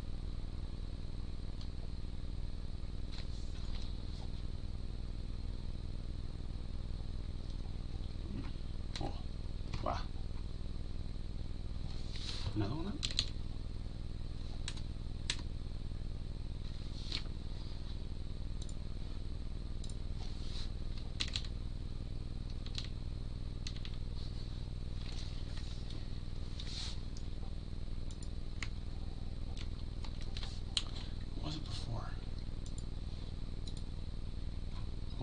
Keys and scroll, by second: 8.9 Escape, 29.6 ctrl+x.